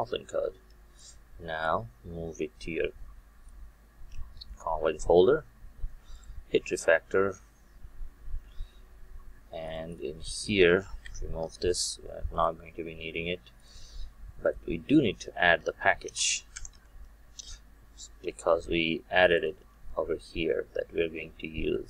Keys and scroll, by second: 12.4 Delete.